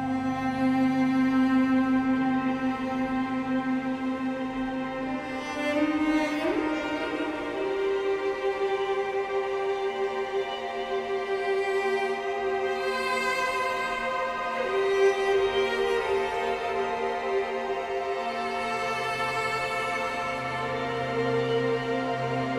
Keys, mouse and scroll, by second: 2.0-4.8 drag, 5.1 click, 6.1 click, 7.1 click, 9.7 shift+a, 11.2-18.8 drag, 18.8-21.0 middle drag, 21.0-22.3 drag, 22.3-22.5 scroll down 1.